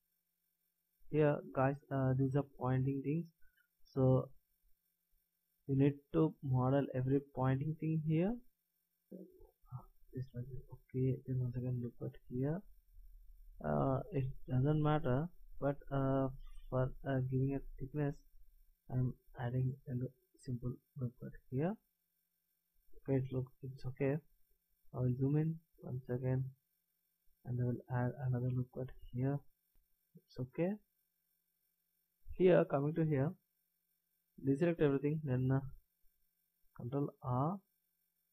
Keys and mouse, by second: 3.6 b, 5.1 a, 6.2 b, 8.7 g, 10.6 a, 11.9 ctrl+r, 15.0 s, 19.5 a, 22.7-24.0 middle drag, 23.7 KP_1, 28.1 ctrl+r, 33.2 middle click, 34.3 a, 35.4 b, 37.2 ctrl+r.